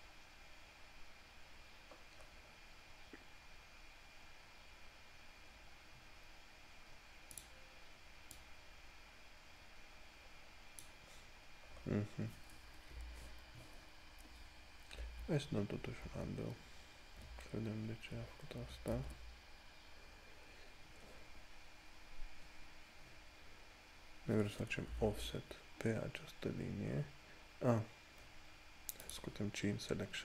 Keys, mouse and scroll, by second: 2.5 scroll up 1, 7.6 click, 11.6 scroll down 1, 14.7 ctrl+scroll down 1, 15.2 ctrl+z, 20.6 scroll up 1, 25.2 o, 29.3 click.